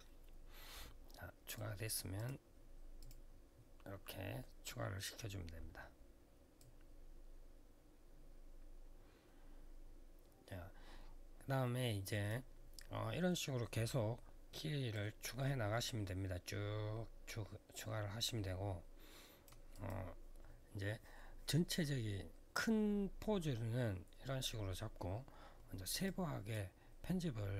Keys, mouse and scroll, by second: 1.3 click, 1.9 click, 2.7 click, 2.8 click, 6.3 click, 14.7 click, 19.5 click, 19.6 click, 25.8 click.